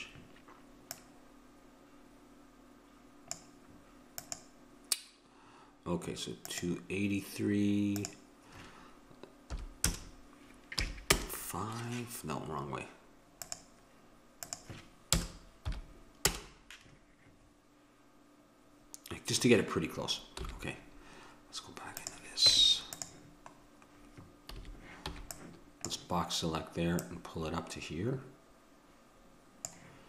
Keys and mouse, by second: 20.3 n, 21.9 click, 22.4 Tab, 24.5 a, 25.1 b, 27.0-29.0 drag.